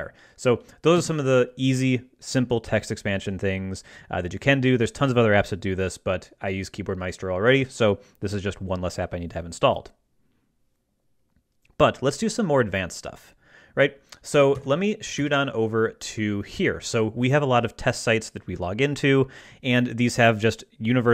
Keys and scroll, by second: 1.0 Escape, 14.6 ctrl+Right.